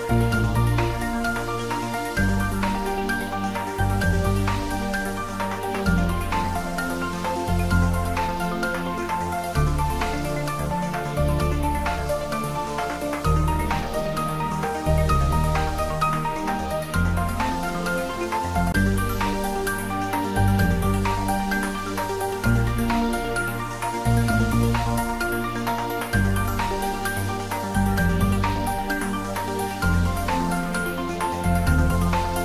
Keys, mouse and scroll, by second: 3.6-4.2 scroll down 1, 8.9 click, 14.3 click, 18.7 click, 21.0-24.3 middle drag, 27.3 click, 31.2 click.